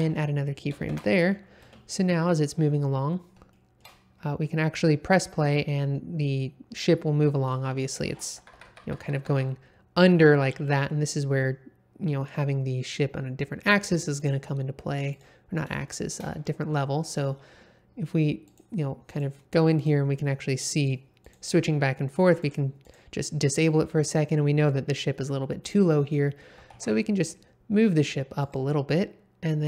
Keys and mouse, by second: 0.9 shift+Left, 1.6 space, 3.5 shift+middle drag, 7.5 space, 8.4 Left, 8.5 Left, 8.7 Left, 8.8 Left, 9.0 Left, 9.1 Left, 9.3 Left, 14.2 drag, 15.1 click, 15.8 shift+middle drag, 18.4 click, 19.1 click, 19.7 click, 20.7 click, 21.2 click, 22.0 click, 22.4 click, 22.8 click, 25.6 click, 26.5 g, 26.7 z, 28.4 click.